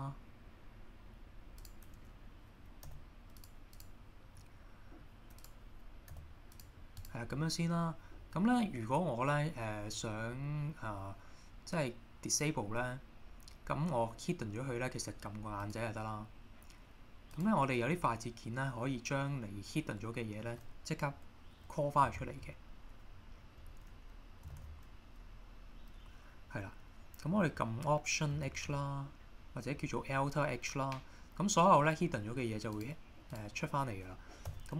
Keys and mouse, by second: 2.8 g, 3.4 click, 4.4-5.0 middle drag, 6.1 g, 6.6 click, 7.3 middle click, 12.4 click, 15.6 click, 17.3 click, 22.1 ctrl+h, 24.5 shift+h, 28.5 alt+h, 32.8 click, 33.3 click, 34.5 h.